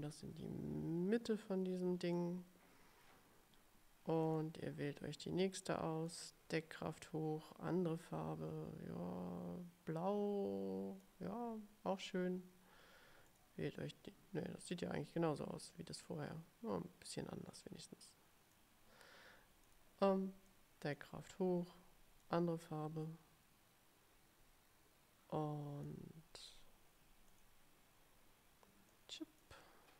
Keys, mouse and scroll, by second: 4.4 click, 5.8 click, 7.2-11.3 drag, 13.4 click, 14.7 click, 16.1-18.8 drag, 19.8 click, 20.6 click, 22.3-26.2 drag, 27.4 click, 29.0 click.